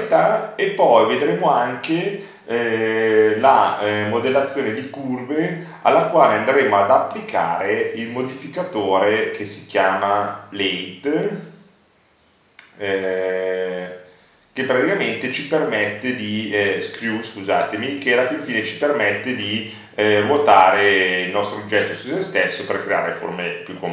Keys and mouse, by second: 16.0-17.1 drag, 20.0-23.9 middle drag.